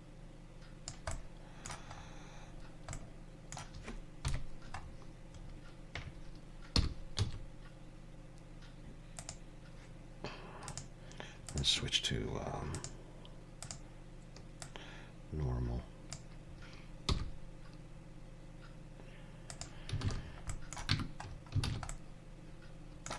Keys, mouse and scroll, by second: 1.1 middle click, 2.1-2.5 scroll up 1, 2.7 scroll down 1, 3.0 middle click, 4.3 KP_3, 4.8-5.6 scroll up 6, 6.8 r, 10.7 click, 12.8 click, 14.7 click, 17.1 r, 20.1 alt+a, 20.3 scroll down 4, 20.5 middle click, 21.0 Tab, 21.3 scroll down 3, 21.7 alt+a, 21.9 middle click.